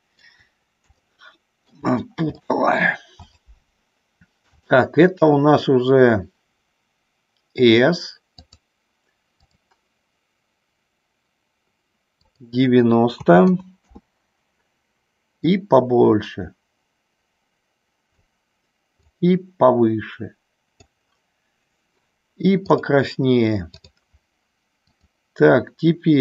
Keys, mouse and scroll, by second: 1.0 shift+middle click, 2.4 middle click, 3.3-4.4 drag, 4.6-8.7 drag, 9.3 click, 12.3-14.4 drag, 15.5-18.2 drag, 19.1-20.9 drag, 22.8 click, 24.9-26.0 drag.